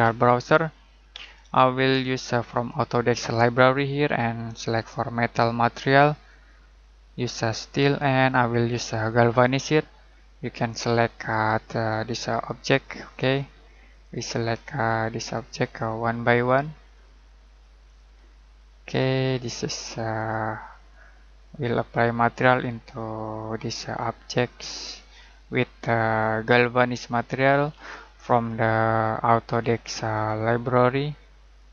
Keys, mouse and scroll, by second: 2.5 click.